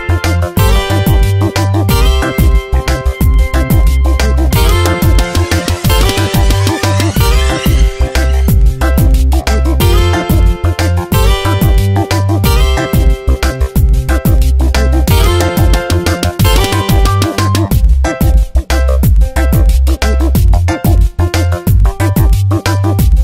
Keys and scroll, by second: 3.2 space, 5.7 space, 8.6 F9, 10.1 ctrl+z, 13.2 space, 16.4 space, 19.7 space.